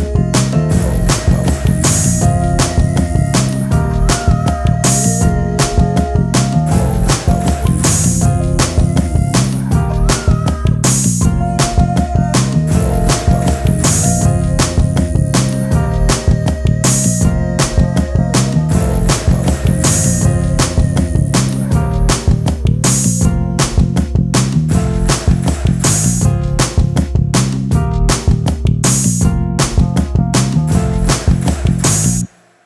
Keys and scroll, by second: 10.5 space, 17.8 space, 25.7 space.